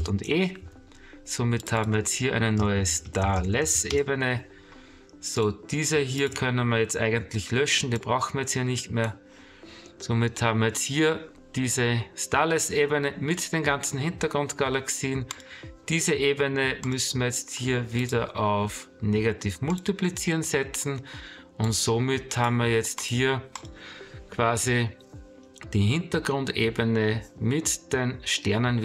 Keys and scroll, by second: 0.0 ctrl+alt+shift+e.